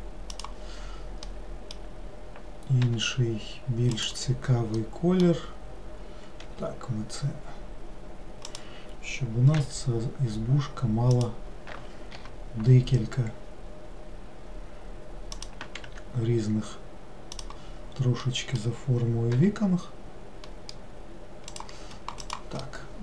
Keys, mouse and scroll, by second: 1.3-2.9 middle drag, 2.9 g, 4.9 middle click, 5.5-6.5 scroll down 1, 6.5 s, 9.6 e, 12.2 i, 15.9 e, 18.3-19.4 middle drag, 19.4 g, 22.3 click, 22.7-23.0 middle drag.